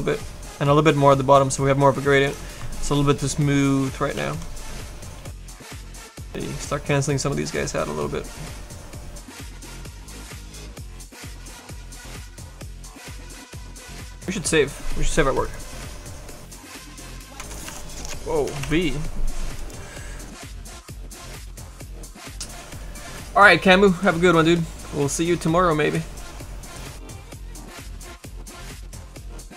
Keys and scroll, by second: 4.1 s, 17.7 v, 18.5 BackSpace, 18.6 c.